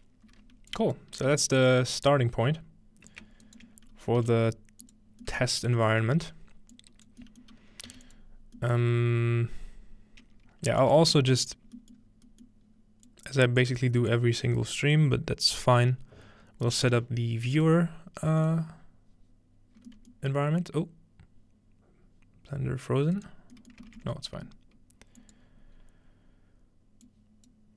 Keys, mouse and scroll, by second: 0.7 click, 1.3 g, 3.5 shift+middle click, 3.8-4.9 scroll up 1, 4.2 shift+g, 4.9 click, 5.6-5.9 scroll down 1, 6.3-6.8 scroll up 1, 6.8 click, 7.9 typing, 8.0 scroll up 1, 8.1 click, 9.5-10.8 scroll down 1, 10.8-12.8 shift+drag, 11.1 shift+d, 11.7 scroll down 1, 11.9 middle click, 12.0 scroll up 1, 12.7 scroll up 1, 13.1-16.0 drag, 16.7 click, 17.6 click, 18.4 click, 23.1 right click, 23.8-25.2 middle drag, 23.9 ctrl+s, 25.2-26.9 drag, 25.8-26.9 scroll up 2, 26.9 scroll up 1, 27.1 click.